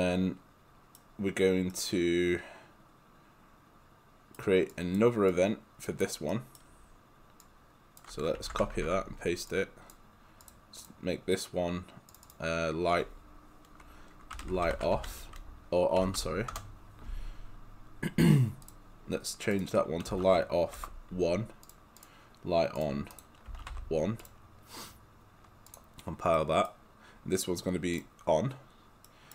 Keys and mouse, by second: 4.7 click, 6.3 right click, 7.4 click, 8.4 ctrl+c, 8.8 ctrl+v, 9.5 click, 10.5 click, 14.2-16.0 typing, 16.6 Return, 18.6 click, 20.1 space, 20.8 1, 21.7 click, 23.5 space, 23.7 1, 24.2 click, 26.3 right click, 28.0 click, 29.1 right click.